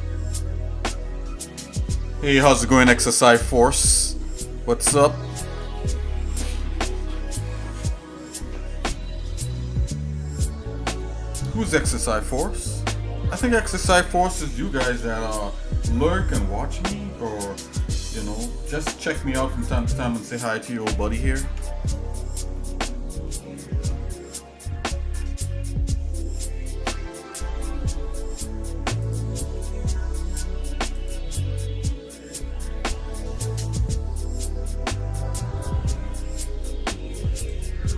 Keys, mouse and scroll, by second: 1.9 shift+middle click, 11.0 shift+middle click, 12.7 shift+middle click, 17.9 click, 19.8 click, 20.7 shift+middle click, 21.4 Tab, 22.2 shift+middle click, 22.6 shift+middle click, 23.4 shift+middle click, 25.1 KP_Divide, 26.3 shift+middle click, 26.8 middle click, 27.2 scroll up 1, 27.9 shift+middle click, 29.0 click, 29.6 middle click, 30.9 click, 36.7 Tab, 37.3 Tab, 37.5-37.9 right drag.